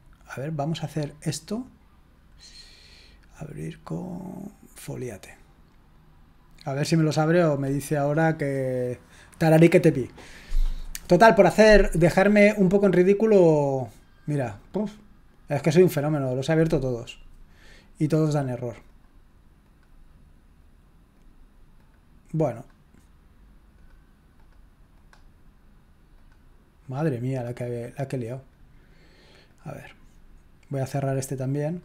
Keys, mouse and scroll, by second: 1.0-2.6 drag, 2.4 right click, 4.7 click, 18.8 click, 19.6 click, 21.1 click, 21.8 click, 22.5 click, 23.7 click, 24.4 click, 25.0 click, 26.2 click, 26.8 click, 27.6-30.4 drag, 30.9 click.